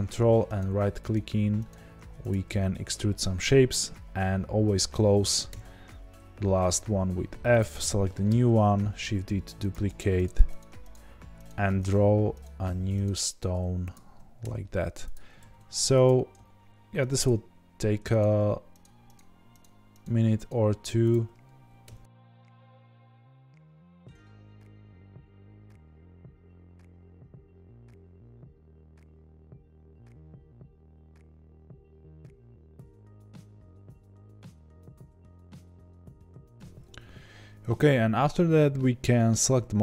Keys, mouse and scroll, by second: 0.5 ctrl+right click, 2.3 shift+click, 5.4 f, 7.5 click, 8.2 shift+d, 10.2 ctrl+right click, 13.9 shift+click, 14.4 f, 15.1 click, 15.3 shift+d, 17.1 ctrl+right click, 21.1 shift+click, 21.8 f, 22.2 click, 22.5 shift+d, 22.9 ctrl+right click, 23.7 shift+click, 23.9 f, 24.5 click, 24.5 shift+d, 24.8 ctrl+right click, 25.6 shift+click, 25.8 f, 26.1 click, 26.1 shift+d, 26.4 ctrl+right click, 27.0 shift+click, 27.2-30.1 typing, 27.5 click, 27.8 ctrl+right click, 28.5 shift+click, 28.9 click, 29.0 middle click, 29.7 click, 30.6 click, 30.7 ctrl+right click, 31.0 ctrl+z, 31.1 ctrl+right click, 31.4 ctrl+z, 31.4 ctrl+right click, 31.6 shift+click, 31.6-35.5 typing, 31.7 click, 32.0 ctrl+right click, 33.3 ctrl+right click, 33.6 shift+click, 33.8 click, 34.3 ctrl+right click, 34.9 shift+click, 35.0 click, 35.7 ctrl+right click, 36.3 shift+click, 36.5 f.